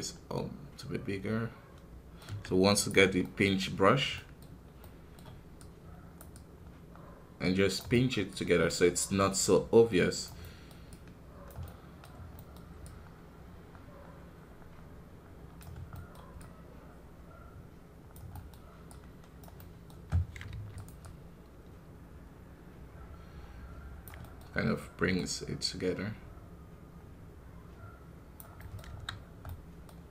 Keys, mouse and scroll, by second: 2.7 click, 3.2 middle click, 3.8-4.1 scroll down 2, 4.1 middle click, 4.4 scroll up 3, 4.7-6.3 middle drag, 6.3-7.9 drag, 7.9-12.8 middle drag, 12.8-15.7 drag, 15.7 scroll down 1, 15.9-28.1 middle drag, 28.5 middle click, 28.8 KP_1, 29.1 scroll down 1, 29.2 scroll up 1, 29.9 scroll up 1.